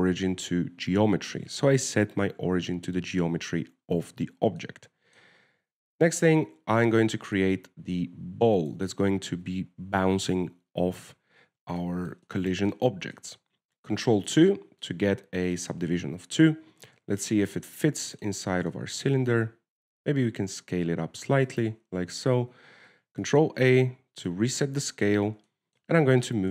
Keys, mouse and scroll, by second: 0.1 ctrl+alt+shift+c, 1.6 middle click, 4.7-5.3 scroll down 1, 6.0 shift+middle click, 7.8 shift+a, 12.8-13.2 scroll down 3, 13.2 shift+middle click, 13.6 middle click, 14.5 shift+middle click, 15.3 ctrl+2, 15.7 middle click, 17.8 KP_7, 18.6 shift+middle click, 19.0-19.3 scroll up 3, 19.4 shift+middle click, 19.8-20.1 scroll up 2, 20.1 shift+middle click, 21.1 s, 22.0 w, 22.8 w, 23.4 ctrl+a, 25.1 middle click, 25.9-26.2 scroll down 4, 26.2 shift+middle click.